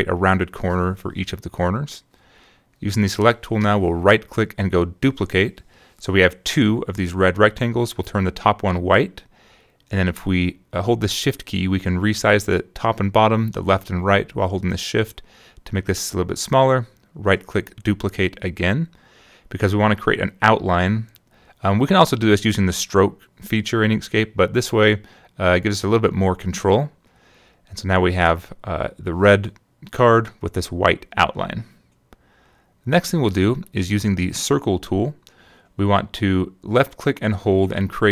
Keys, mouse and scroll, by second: 1.1 click, 2.3 right click, 5.3 click, 7.2 click, 9.9 shift+click, 12.7 shift+click, 15.7 right click, 17.4 click, 21.2 click, 22.9-24.6 shift+drag, 25.8-28.9 shift+drag, 29.7 click, 35.7 click.